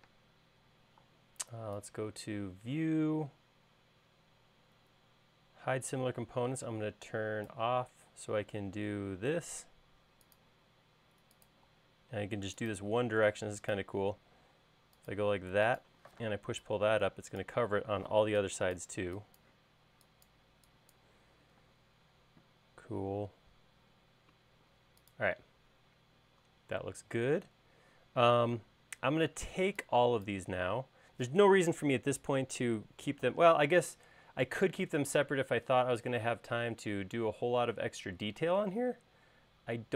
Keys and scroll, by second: 0.3 space, 8.3 l, 11.9 l, 16.4 p, 18.0 e, 21.9 space, 27.5 |, 28.9 space.